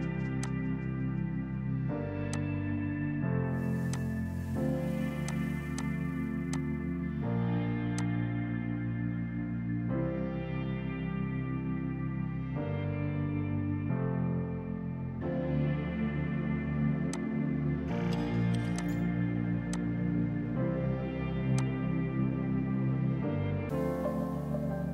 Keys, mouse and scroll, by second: 7.6 space, 8.0 click, 16.5 F4, 17.2 click.